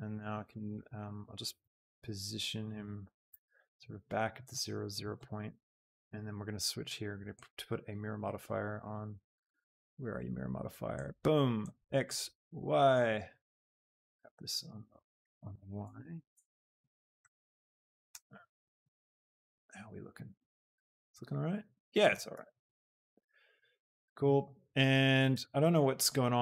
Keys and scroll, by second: 3.1 KP_0, 3.5 Return, 13.8 g, 14.1 y, 14.9 a, 16.3 Tab, 18.2 y, 22.2 shift+y, 25.5 shift+Tab.